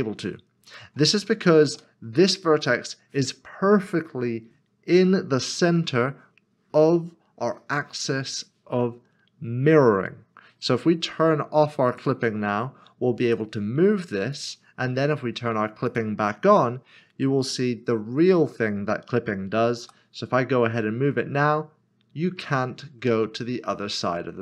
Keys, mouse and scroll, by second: 0.7 click, 1.7 ctrl+z, 2.7 middle click, 11.9 click, 13.2 g, 14.3 click, 19.8 g.